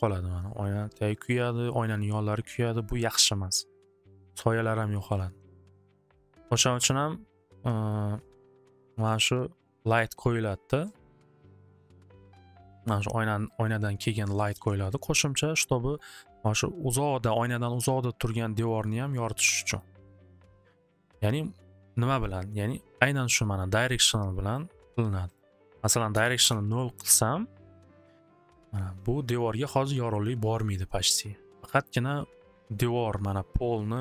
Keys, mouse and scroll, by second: 0.7 Return, 5.6 click, 5.8 click, 5.8 1, 6.0 Return, 9.0 click, 11.2 click, 11.5 alt+w, 11.8 alt+w, 13.4 click, 14.3 alt+w, 15.9 click, 19.5-24.1 drag, 25.3 click, 25.5 click, 26.1 0, 26.4 Return.